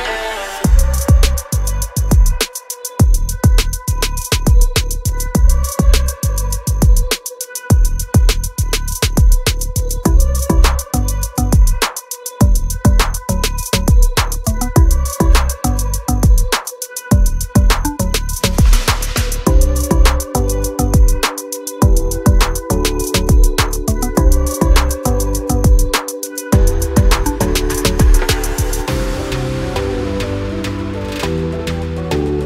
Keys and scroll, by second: 1.6 space, 1.9 p, 4.1 space, 7.2 m, 8.5 space, 9.2 p, 10.1 space, 17.3 m, 18.6 space, 19.2 p, 22.4 space, 25.0 space, 25.1 Escape, 27.1 r, 28.3 space, 29.1 m.